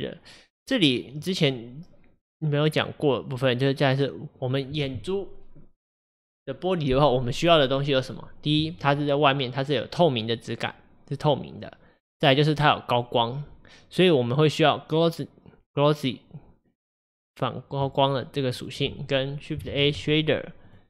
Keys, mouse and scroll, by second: 20.1 shift+a.